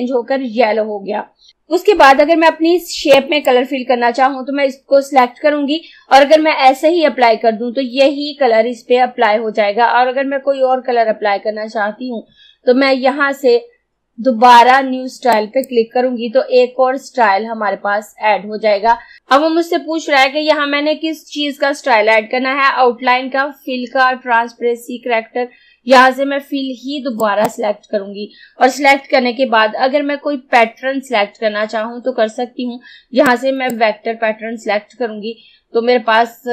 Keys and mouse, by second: 3.2-15.4 drag, 27.2 click, 33.4-36.2 drag.